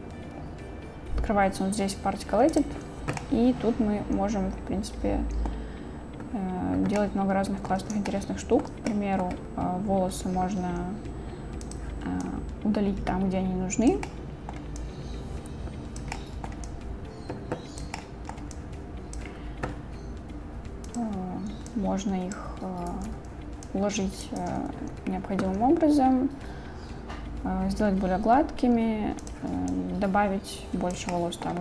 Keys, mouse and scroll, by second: 3.2-5.5 middle drag, 7.0-7.7 middle drag, 8.1-8.6 shift+drag, 8.9 click, 12.3-13.9 drag, 14.1-14.6 drag, 14.8-16.0 drag, 16.1-16.5 middle drag, 16.7-17.8 drag, 18.0-18.3 middle drag, 18.6-19.2 drag, 20.9 click, 21.7-22.4 drag, 23.1 ctrl+z, 23.7-24.4 drag, 24.5 ctrl+z, 29.3 click, 29.8-31.0 drag, 31.1-31.5 drag.